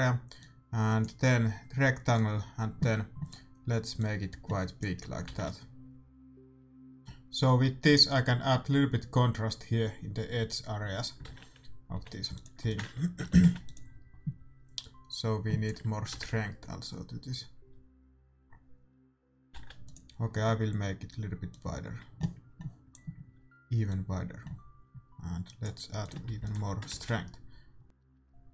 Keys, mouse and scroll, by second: 11.6 shift+z, 11.9 g, 12.6 ctrl+s, 13.2 r, 14.8-17.4 drag, 17.4 shift+z, 19.5 ctrl+s, 19.5 shift+z, 21.4-23.3 drag, 23.8-25.6 drag, 26.0-27.8 drag, 26.3 ctrl+s, 27.8 shift+z.